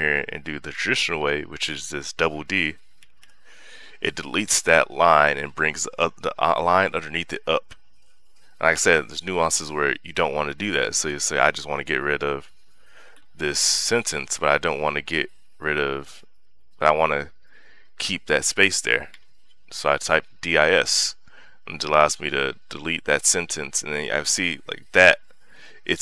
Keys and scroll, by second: 1.0 u, 2.8 d, 9.1 u, 10.9 d, 13.0 i, 19.4 s.